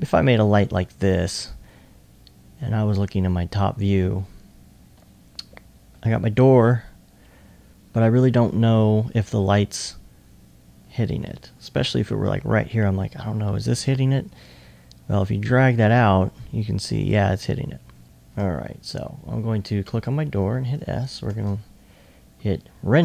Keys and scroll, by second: 4.0 typing, 5.0-5.8 typing, 20.3 s.